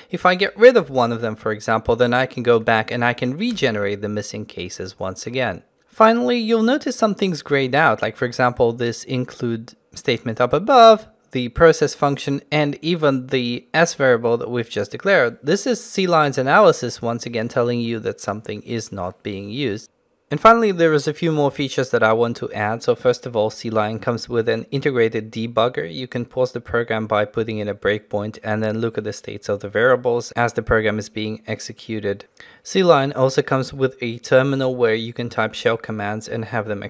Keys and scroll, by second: 0.7 ctrl+x, 1.0 ctrl+x, 2.6 ctrl+x, 2.9 alt+Return.